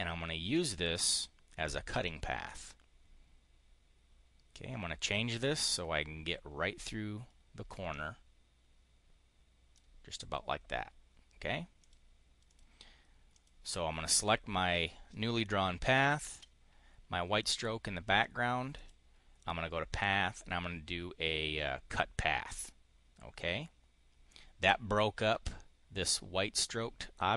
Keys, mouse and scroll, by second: 0.9 click, 1.9-5.1 drag, 7.5-9.7 drag, 11.6 click, 12.4 click, 13.2 click, 15.9 shift+click, 18.6 click, 22.3 click, 27.2 click.